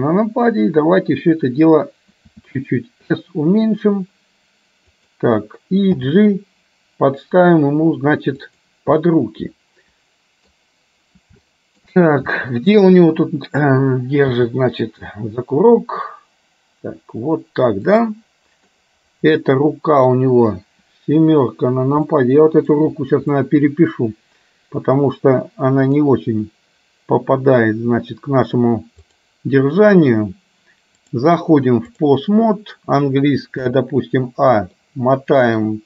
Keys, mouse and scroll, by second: 2.5 s, 6.1 g, 9.1-12.0 middle drag, 12.5 shift+middle click, 12.7 scroll down 1, 14.5 g, 18.9-20.0 scroll up 1, 20.0 scroll up 1, 22.3 middle click, 23.5-26.1 middle drag, 26.5 middle click, 27.1 scroll up 1, 27.5-28.7 middle drag, 31.1-32.2 drag, 33.7 a, 35.0 middle click.